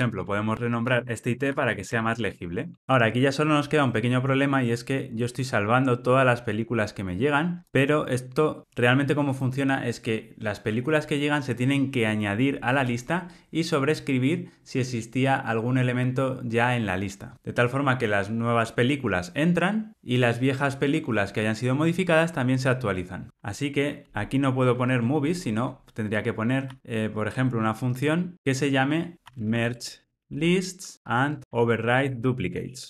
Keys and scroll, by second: 28.3 alt+shift+super+o.